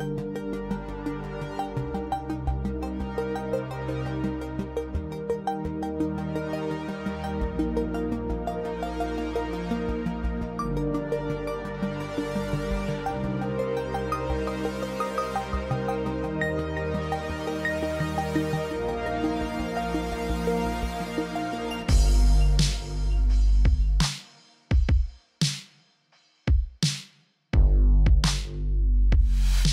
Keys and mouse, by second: 0.4-1.4 drag, 1.6-2.9 drag, 3.2 s, 3.9 s, 4.4 g, 5.0 ctrl+z, 6.6 h, 9.2 click, 14.2 ctrl+z, 17.0 e, 19.3-20.7 middle drag.